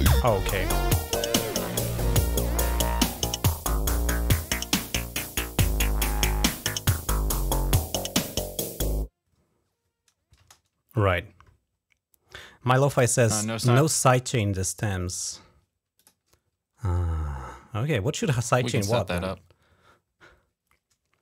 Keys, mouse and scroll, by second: 3.5 click, 10.2 space, 15.8 click, 18.7 click.